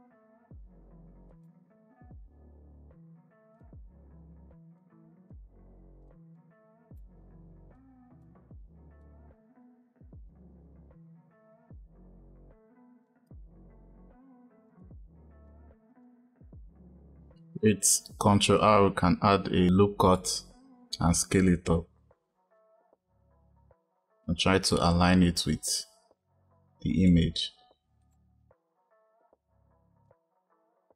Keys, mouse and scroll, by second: 2.4 s, 4.7 click, 5.9 click, 6.6 e, 7.6 click, 8.9 click, 9.3 e, 11.9 e, 13.2 e, 15.4 e, 15.8-16.2 drag, 16.5 ctrl+r, 27.9 click, 30.0 ctrl+r.